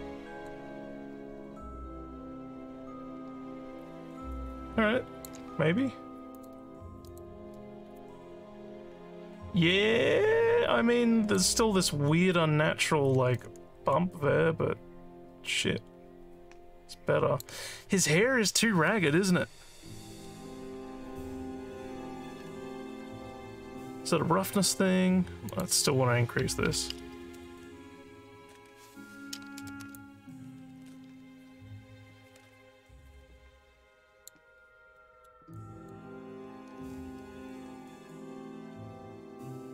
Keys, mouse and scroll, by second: 1.4-5.3 alt+drag, 6.3 click, 7.1 click, 8.0-11.3 alt+drag, 13.3-17.4 alt+drag, 20.2 scroll down 1, 22.3 scroll up 2, 25.5 click, 30.0-34.2 alt+drag, 35.0 alt+middle click, 35.5 alt+click.